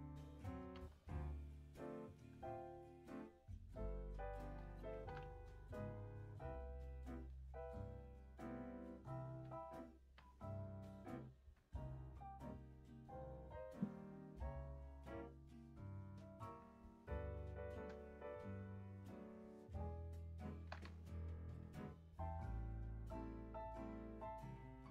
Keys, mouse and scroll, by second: 1.0 click, 1.5 click, 1.8 z, 2.4-3.2 middle drag, 3.6 click, 3.9 scroll down 2, 4.0-4.8 middle drag, 4.8 g, 13.0 click, 14.4-17.0 drag.